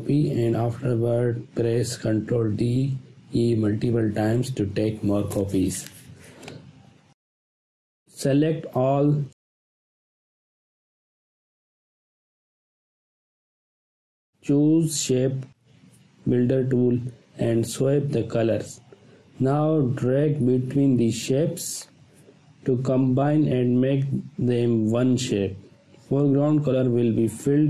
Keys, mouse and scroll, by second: 2.7 ctrl+d, 3.7 space, 3.8 ctrl+click, 4.6-4.9 click, 5.7 ctrl+d, 8.0 space, 8.4-9.1 ctrl+drag, 10.4 space, 10.5-11.1 click, 10.9 space, 11.1-11.7 ctrl+drag, 14.7 click, 17.9 space, 18.0-18.7 ctrl+drag, 22.0-25.7 drag.